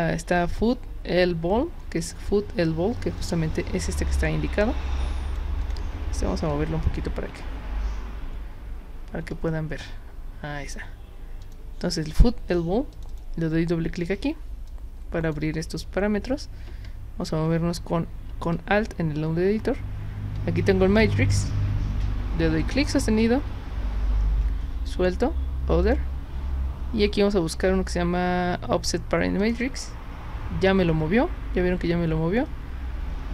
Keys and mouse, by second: 3.2-5.4 drag, 5.7 click, 6.5 alt+click, 11.4 click, 13.0 click, 13.1 click, 14.7-15.3 drag, 22.6-24.9 drag, 25.8 click, 29.4 click.